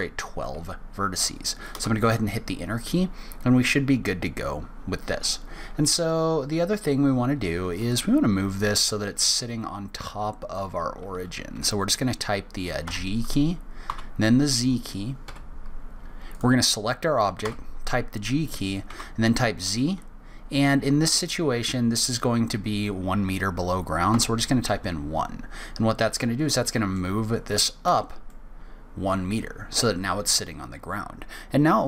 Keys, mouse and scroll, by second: 7.8 click, 12.8 g, 13.9 z, 16.3 click, 17.4 g, 28.3 middle click.